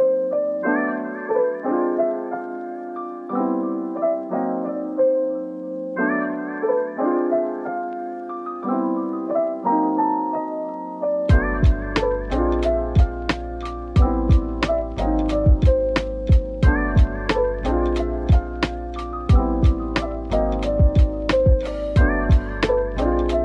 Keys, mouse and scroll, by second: 0.2 Tab, 0.9-1.5 typing, 2.7 middle click, 3.6-4.2 scroll up 1, 4.9 Tab, 5.9 /, 6.7 middle click, 8.1 double click, 8.9 Tab, 9.6 middle click, 10.2 Tab, 12.9 middle click, 18.1-20.1 scroll down 1, 20.1 double click, 22.8 middle click, 23.3-23.4 scroll down 1.